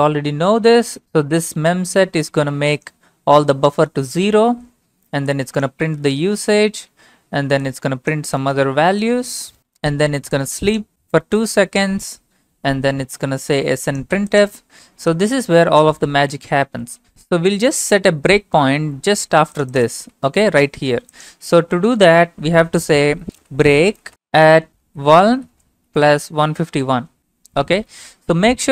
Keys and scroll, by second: 23.3-26.9 typing.